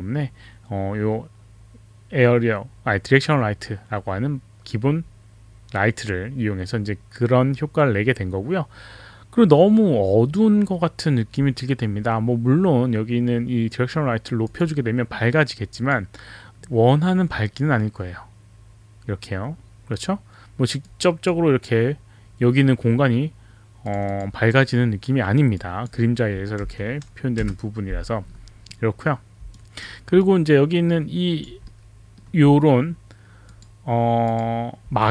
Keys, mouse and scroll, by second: 14.5 click, 15.8 click, 20.8 click, 23.9 click, 24.1 click, 25.5 click, 26.6 1, 27.4 Return, 29.6 alt+right click, 30.2 alt+click, 31.6 alt+middle click, 33.5 click, 34.3 click.